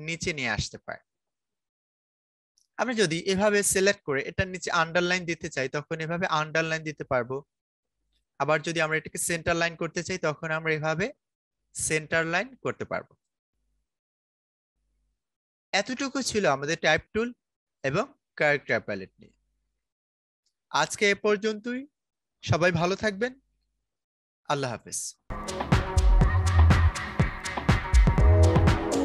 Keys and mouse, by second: 1.9-5.1 drag, 8.0 click, 13.0-24.3 drag.